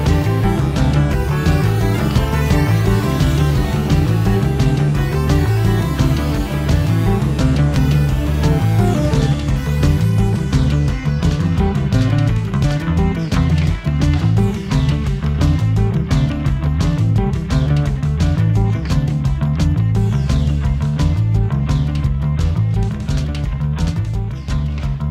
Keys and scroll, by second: 5.1 Escape, 16.9 Escape, 18.3 d, 21.2 0, 21.3 ., 21.5 6, 21.8 Return, 23.0 Escape.